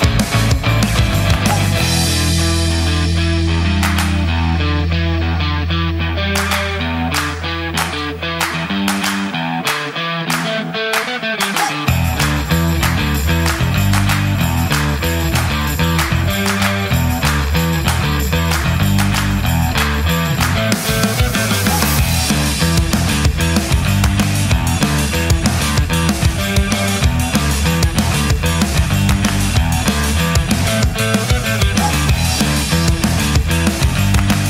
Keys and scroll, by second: 27.6 space, 28.7 space.